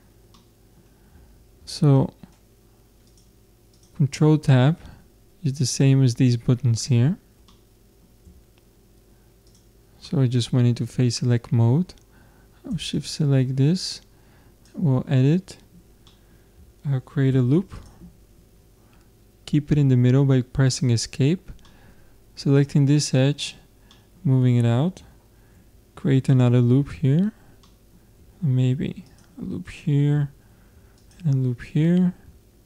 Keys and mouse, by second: 1.4 ctrl+Tab, 3.9-5.5 drag, 7.5 middle click, 9.5 click, 10.0-11.2 middle drag, 13.0-15.7 drag, 16.1 middle click, 17.3 ctrl+r, 20.7 click, 21.7 middle click, 22.3 click, 22.6 middle click, 23.3 click, 23.9-25.6 middle drag, 25.6 ctrl+r, 27.6-29.1 middle drag, 28.7 ctrl+r, 29.3 middle click, 30.5 ctrl+r, 32.1 ctrl+Tab.